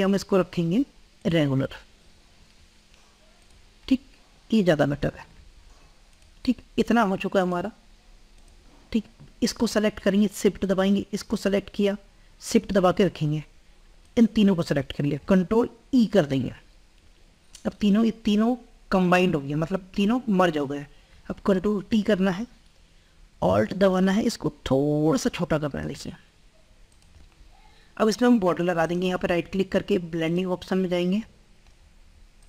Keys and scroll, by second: 16.0 ctrl+e, 17.2 ctrl+e, 21.8 ctrl+t, 25.0 ctrl+t.